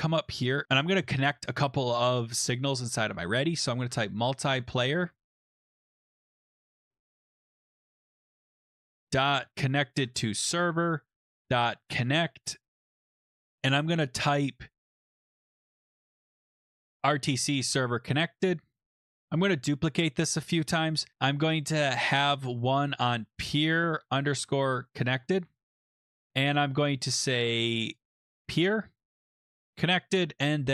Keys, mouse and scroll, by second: 0.6 click, 0.6 Return, 3.3-7.3 typing, 9.0-12.6 typing, 12.9 Tab, 14.5-16.9 typing, 17.7 Right, 18.9 ctrl+c, 19.0 ctrl+v, 19.1 ctrl+v, 21.9 click, 22.1 click, 23.3-29.7 typing, 28.3 click.